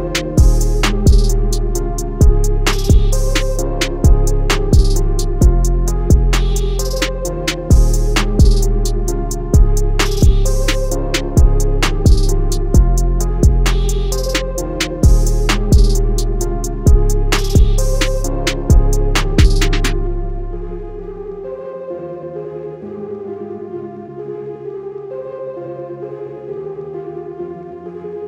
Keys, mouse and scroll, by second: 0.2 alt+scroll down 1, 0.9 click, 2.5 alt+scroll down 1, 3.1 click, 4.6 scroll down 1, 5.0 scroll up 1, 5.2-5.6 scroll down 2, 5.7 scroll up 1, 6.6 click, 8.5 z, 9.2 click, 13.1 scroll down 1, 13.4 scroll up 1, 14.0 click, 19.5 click, 21.5 Escape, 22.2 click, 25.1 click.